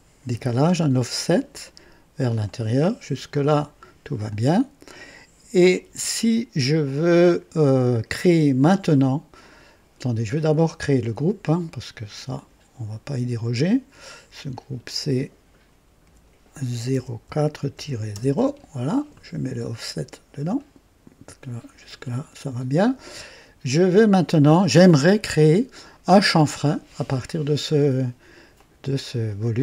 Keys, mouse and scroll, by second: 0.3 KP_5, 2.4 click, 3.3 click, 4.3-5.8 drag, 6.8-8.6 drag, 12.3 click, 14.5 click, 16.0 F2, 16.9 KP_0, 17.2 KP_4, 17.7 KP_Subtract, 18.1 KP_0, 18.3 Return, 20.5-21.4 drag, 22.8 click, 23.7 click, 24.5 click, 28.5 click, 29.4 click.